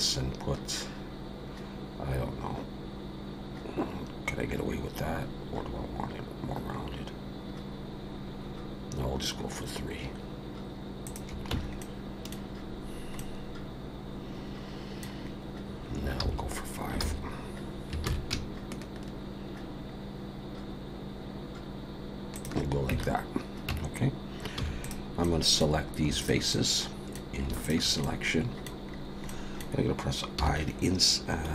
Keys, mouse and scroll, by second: 11.5 Tab, 11.8 middle click, 13.2 middle click, 15.3 scroll up 2, 16.3 ctrl+z, 17.0 ctrl+z, 18.0 ctrl+b, 22.9 Tab, 23.7 Tab, 24.6 3, 24.8 click, 25.2 middle click, 26.2 shift+click, 26.5 middle click, 27.6 shift+click, 28.0 middle click, 28.9-29.3 scroll down 2, 29.3 middle click, 30.4 i.